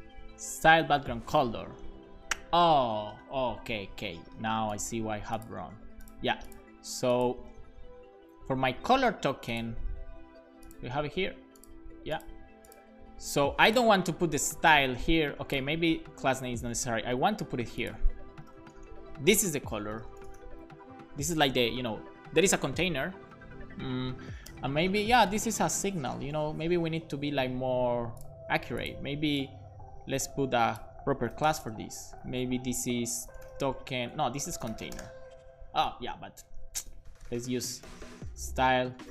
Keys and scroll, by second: 15.8 super+x, 18.3-20.9 typing, 24.3-26.1 typing, 26.2 Left, 26.6 super+v, 27.0 super+s, 27.1 Up, 27.3 Up, 31.3 BackSpace, 31.5 shift+i, 31.6 shift+space, 33.2-35.5 typing, 34.2 alt+shift+Left, 36.1 super+z, 36.9-38.4 typing.